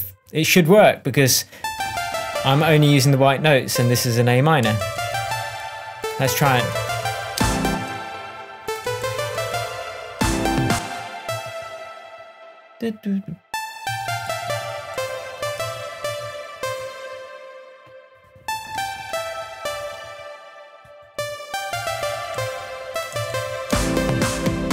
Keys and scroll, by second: 4.6 Up, 6.7 Up, 7.3 space, 8.8 Up, 10.1 space, 11.2 Down, 13.8 Down, 15.3 Up, 16.0 Down, 21.1 Up, 21.7 Down, 23.7 space.